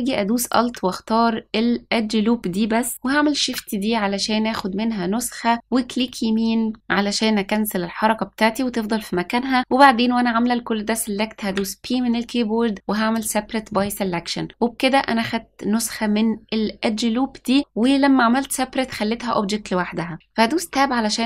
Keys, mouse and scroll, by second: 0.4 alt+click, 3.3 shift+d, 11.4 p, 20.6 Tab.